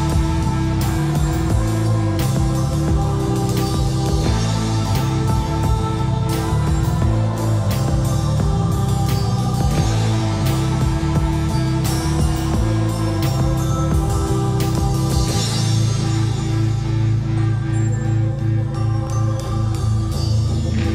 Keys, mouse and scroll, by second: 0.3-2.1 typing, 3.1 click, 4.7-5.1 scroll up 1, 6.3-6.7 typing, 6.8 scroll up 1, 8.9 Escape, 9.3-11.2 typing, 12.5-13.4 scroll up 1, 13.2-14.2 typing, 14.6 click, 15.0 scroll down 1, 15.4-16.8 scroll up 1, 16.8 click, 17.1-17.5 scroll down 1, 18.2 shift+middle click, 18.9-19.3 scroll up 1, 19.3-20.7 typing.